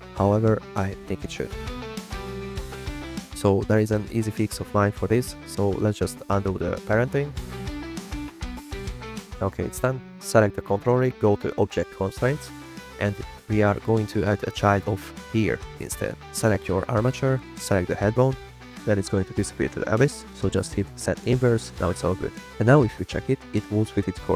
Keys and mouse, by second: 5.4 shift+drag, 5.6 click, 7.0-7.3 drag, 7.9-9.2 ctrl+z, 9.6 r, 10.0 click, 10.3 click, 12.3 drag, 12.9-16.4 drag, 16.9 click, 18.4-19.6 drag, 21.4 click, 22.0-22.9 drag, 22.9 r, 23.7 click, 24.3 r.